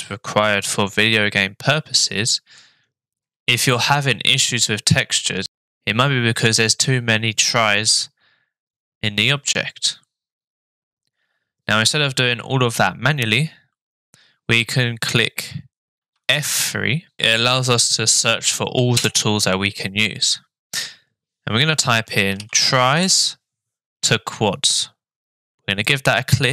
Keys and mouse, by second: 1.8 shift+middle click, 16.2 F3.